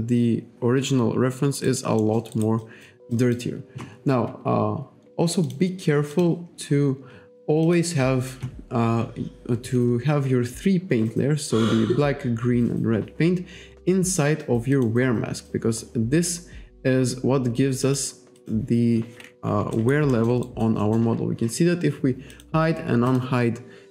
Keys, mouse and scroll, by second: 1.7 alt+right click, 2.1 alt+middle click, 2.4 alt+right click, 2.7 alt+click, 3.2 alt+click, 5.5 click, 6.2 click, 7.7 click, 14.8 click, 17.9 click, 18.4 click, 19.8 alt+right click, 20.2 alt+middle click, 20.5 alt+right click, 20.9 alt+middle click, 22.4 click, 23.1 click.